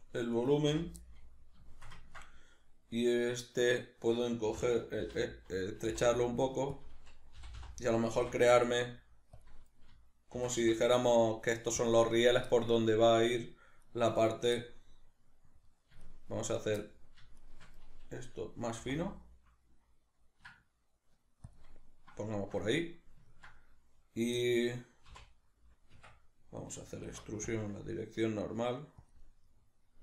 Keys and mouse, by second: 0.3 right click, 0.7 l, 1.0-6.8 middle drag, 4.5 s, 6.8 click, 7.4 g, 9.4 click, 10.3 shift+d, 11.9 click, 12.5-13.8 shift+middle drag, 13.8 right click, 14.5-16.0 middle drag, 16.0 shift+right click, 16.5 shift+right click, 16.8 middle click, 17.4 shift+right click, 21.6 shift+click, 21.7-25.1 middle drag, 25.1 x, 29.1 click, 29.2 middle click.